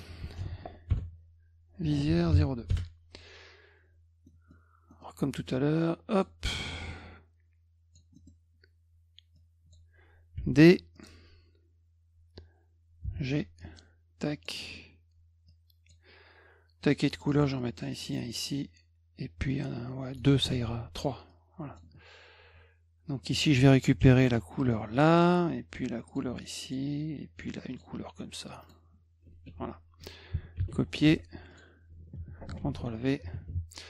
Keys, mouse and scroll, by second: 0.4 ctrl+v, 0.9 BackSpace, 2.1 e, 2.7 Return, 4.3 middle drag, 4.9 middle click, 6.1 click, 6.6-7.9 drag, 8.1 middle click, 9.3 click, 10.9 click, 13.6 click, 15.5 click, 17.2 click, 17.3 click, 17.9 click, 18.1 click, 19.5 click, 20.6 z, 21.3 click, 23.2 click, 24.0 d, 24.9 click, 26.1 click, 26.6 click, 27.7 click, 28.6 click, 30.7 c, 31.1 F2, 31.5 click, 32.6 ctrl+shift+v.